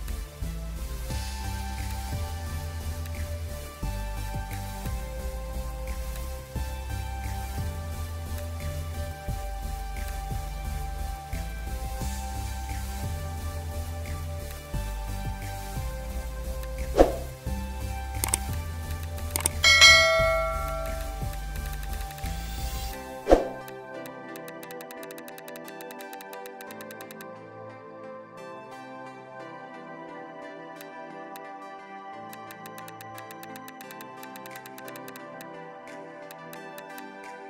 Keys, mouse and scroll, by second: 1.4 ], 1.5 ], 2.9 space, 3.6 scroll down 1, 5.9 space, 6.6 [, 7.4 scroll down 1, 7.8 ], 10.6 scroll down 1, 11.8 scroll up 1, 12.8 ], 14.3 space, 15.4-16.2 scroll down 1, 17.6 [, 17.8 [, 18.0 [, 18.9 double click, 22.8 space, 24.4 double click, 30.6 space, 32.4 double click, 35.8 ], 35.9 ], 36.1 ], 36.4 double click.